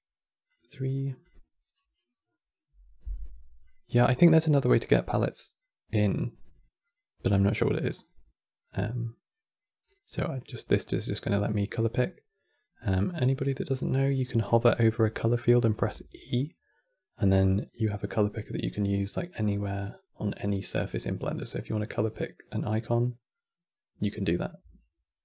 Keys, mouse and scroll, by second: 0.2 click, 0.9-3.4 drag, 6.5 click, 7.2 click, 9.6 click, 10.4 click, 12.6 click, 15.4 e.